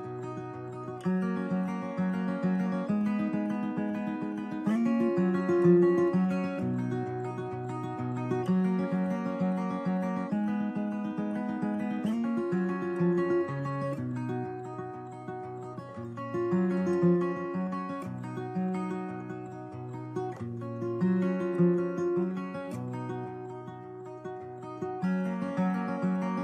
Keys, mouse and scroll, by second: 4.1 Escape, 7.5 F12, 18.7 Escape, 20.0 right click, 21.5 Tab, 21.6 a, 21.7 a, 22.2 u, 22.8 Tab, 24.3-25.5 drag, 25.8-26.4 drag.